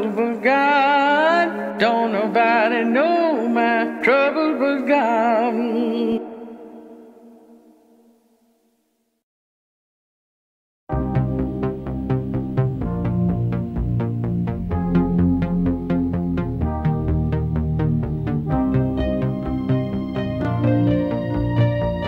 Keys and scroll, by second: 2.5 alt+w, 13.0 q.